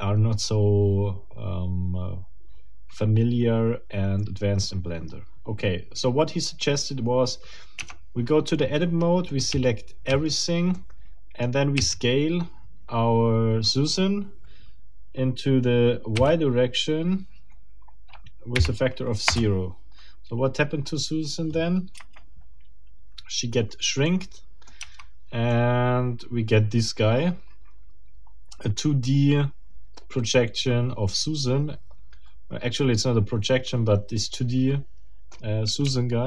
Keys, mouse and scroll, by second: 7.8 Tab, 9.3 middle click, 9.6 a, 10.7 middle click, 11.8 s, 16.2 y, 18.5 0, 19.3 Return, 22.0 Return, 24.0 middle click, 24.8 Tab, 25.5-35.3 middle drag, 35.3-35.7 scroll up 2, 35.9 shift+middle click.